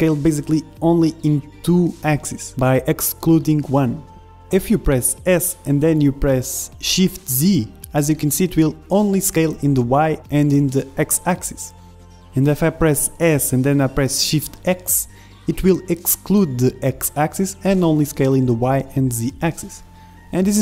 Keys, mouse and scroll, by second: 0.5 Tab, 1.5 middle click, 2.1-3.4 middle drag, 3.4 shift+s.